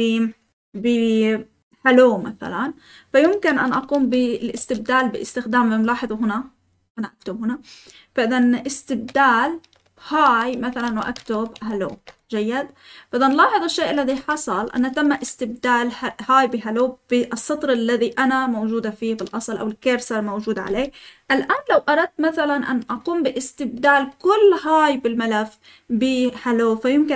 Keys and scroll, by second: 3.7-4.5 typing, 9.6-12.0 typing, 13.6-15.9 typing, 14.5 Escape.